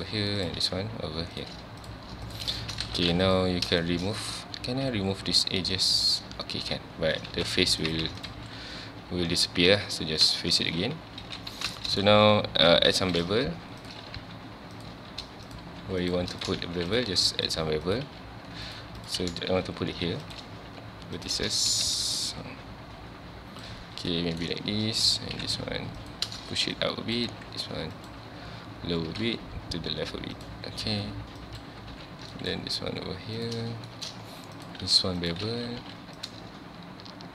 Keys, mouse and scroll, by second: 0.4 click, 0.6 g, 1.8 click, 2.0 g, 2.6 shift+middle click, 2.8 alt+., 3.0 a, 3.1 2, 3.2 click, 3.7 scroll down 2, 3.8-4.9 shift+middle drag, 4.9 x, 7.3 ctrl+s, 7.6 2, 7.8 click, 8.2 alt+click, 8.7-9.2 scroll down 1, 9.2-9.6 scroll up 1, 9.6 f, 10.4 shift+middle click, 10.7 z, 11.2 alt+a, 11.6 s, 11.8-12.9 shift+middle drag, 12.9 1, 13.1 click, 13.8 click, 14.2 g, 14.8 click, 15.5 click, 15.6 g, 16.4 click, 16.6 ctrl+x, 16.9 click, 17.1 g, 17.9 click, 18.0 g, 19.0 click, 19.9 ctrl+b, 20.3 click, 21.2 click, 22.3-24.1 shift+drag, 24.1 shift+middle click, 25.0 click, 25.3 g, 26.1 click, 26.7 click, 27.3 g, 28.1 click, 29.1 g, 30.5 click, 31.4 click, 31.8 g, 32.5 right click, 33.5 click, 33.9 shift+middle click, 34.6 click, 34.8 g, 35.3 click, 35.8 ctrl+b, 36.3 click.